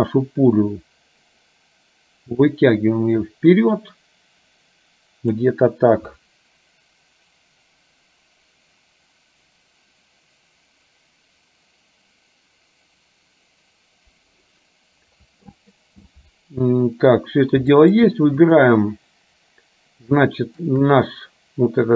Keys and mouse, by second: 2.6-5.4 drag, 17.8 shift+middle click, 18.4 click, 20.4 shift+middle click.